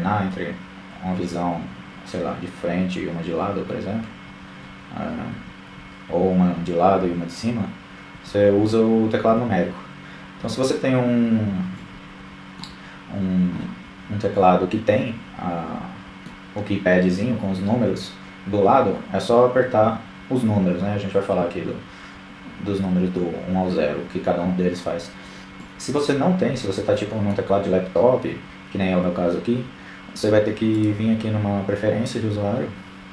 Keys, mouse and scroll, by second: 1.4 KP_3, 1.8 KP_1, 2.5-4.3 middle drag, 3.7 KP_3, 4.1 KP_1, 5.0 KP_3, 5.5 KP_7, 6.6 KP_1, 6.8 KP_3, 7.7 KP_7, 8.9 KP_1, 11.4-14.1 middle drag, 30.2 click.